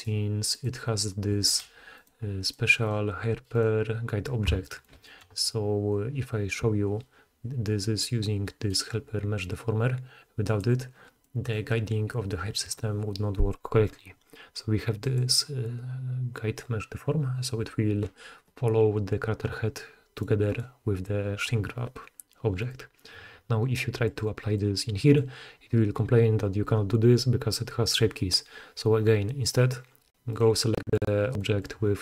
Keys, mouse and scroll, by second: 0.0 middle click, 0.5 click, 0.6-1.2 middle drag, 1.5-2.0 middle drag, 2.0 click, 2.1 middle click, 2.4 click, 2.5 middle click, 2.8 click, 2.9-3.5 middle drag, 3.5 click, 3.6-11.2 middle drag, 11.3-15.2 middle drag, 15.2-32.0 drag, 20.1 middle click, 20.1 right click, 20.5 middle click, 20.5 right click, 22.6 middle click, 22.6 right click, 30.3 middle click, 30.3 right click.